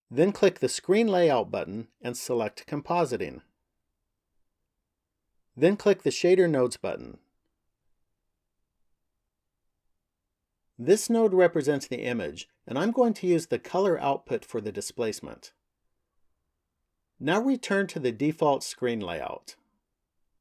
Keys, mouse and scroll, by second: 0.5 click.